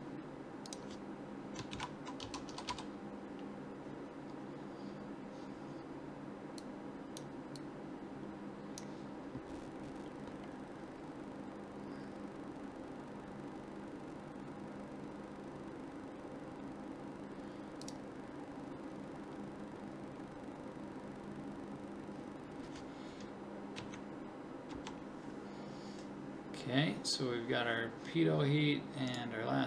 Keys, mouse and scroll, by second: 2.7 t, 23.8 Right, 24.7 Left.